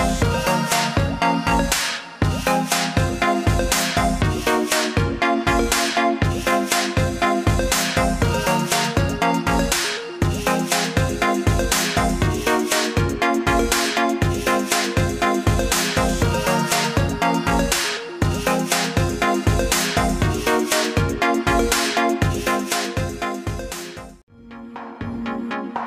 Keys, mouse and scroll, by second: 1.0 click, 3.5 click, 4.7 click, 5.6 click, 7.4 click, 8.4 alt+scroll up 1, 10.2 alt+scroll down 2, 10.9 alt+scroll down 1, 11.8 click, 12.2 scroll up 1, 12.7-13.3 scroll down 2, 14.0 click, 14.5 click, 15.4 scroll up 1, 16.0 scroll up 1, 17.6 click, 19.5 ctrl+z, 19.9 click, 20.8 click, 21.5 click, 22.1 click, 23.0 click, 23.6 click, 25.0 click.